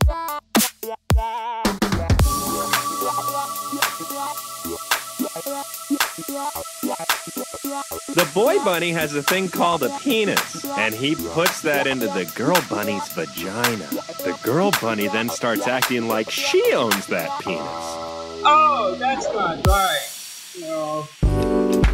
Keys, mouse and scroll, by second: 0.2 click, 0.2-0.8 typing, 1.7 click, 2.3 x, 3.5 click, 3.9 middle click, 5.0 ctrl+z, 5.4 ctrl+z, 6.2 ctrl+z, 7.0 click, 8.6 click, 9.6-11.8 typing, 11.0 click, 13.0 click, 13.3 middle click, 15.4-15.9 middle drag, 15.9 click, 17.9 g, 18.0 x, 19.3 click, 19.8-20.5 drag, 21.0 click.